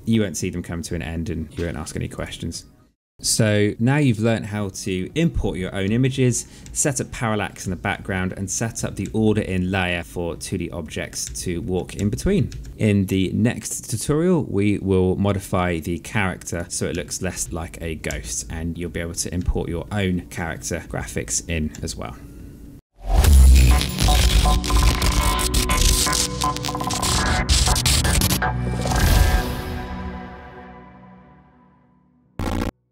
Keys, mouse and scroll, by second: 1.9 click, 3.3 click, 5.6 Right, 6.4 Left, 7.4 Right, 8.5 Right, 8.8 Left, 10.0 Right, 11.1 Left, 12.3 Right, 16.1 click, 16.6 Right, 17.6 Left, 18.9 Right, 20.5 Left.